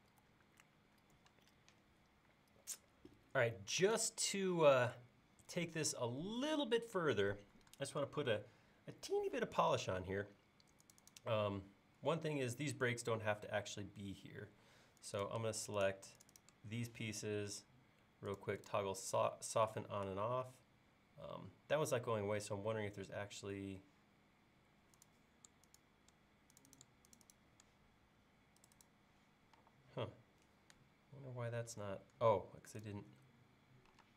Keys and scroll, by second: 29.6 e, 34.0 space.